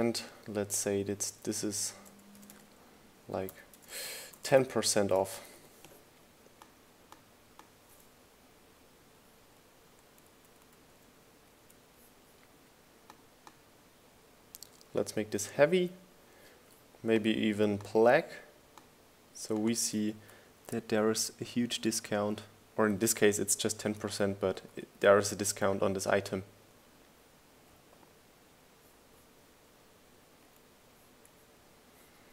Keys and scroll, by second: 1.8 BackSpace, 3.0 BackSpace, 3.6 3, 4.1 shift+4, 4.6 shift+BackSpace, 6.8 1, 7.1 shift+4, 7.7 BackSpace, 8.0 shift+5, 12.0 Right, 12.9 Left, 13.5 Up, 14.2 Down, 22.9 Left, 23.3 Up, 24.4 Right, 24.8 Down, 25.5 Left, 25.7 Up, 27.3 Left.